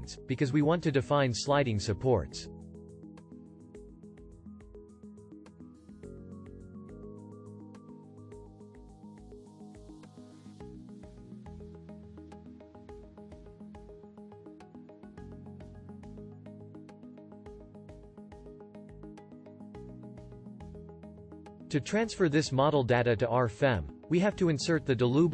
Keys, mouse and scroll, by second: 1.2-3.6 ctrl+drag, 6.7-8.8 shift+drag, 11.7-13.9 drag, 16.5-18.9 drag.